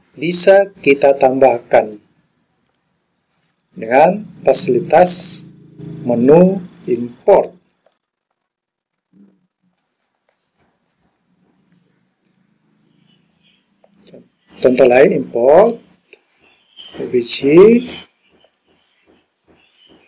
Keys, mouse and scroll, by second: 13.9-17.1 drag.